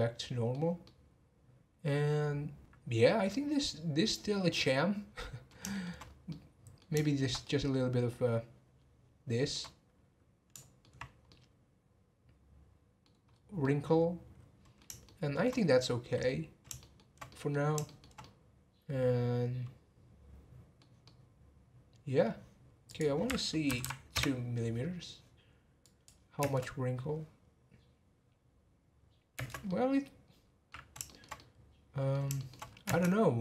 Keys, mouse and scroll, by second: 6.0 scroll up 1, 6.3-11.0 middle drag, 11.0 scroll down 1, 11.3-13.3 middle drag, 13.3-13.6 scroll up 2, 13.6-17.6 middle drag, 17.6 scroll down 1, 17.8-22.9 shift+middle drag, 22.9 click, 23.8 m, 25.8-26.4 drag, 26.4 space, 29.3 space, 29.7-32.6 middle drag, 32.6 scroll up 1, 32.8 space.